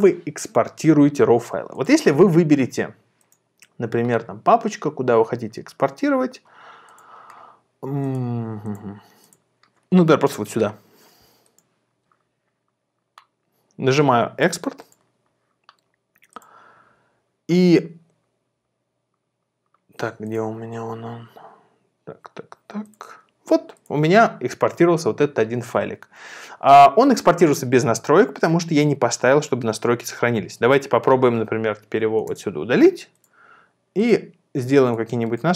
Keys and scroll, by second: 32.2 super+BackSpace.